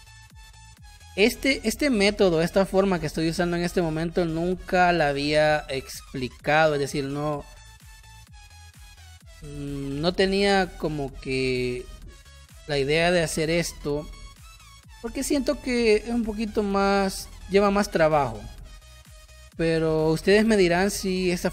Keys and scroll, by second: 4.1 space, 9.7 space.